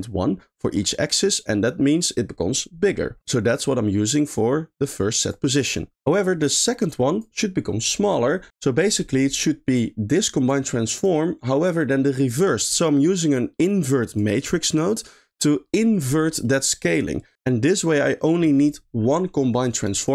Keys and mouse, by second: 1.2 middle click, 4.8 click, 5.5 click, 6.1 middle click, 6.9 click, 10.1 click, 10.9 click, 13.3 click, 14.0 click, 14.7 middle click, 16.3 middle click, 17.9 middle click, 19.7 click.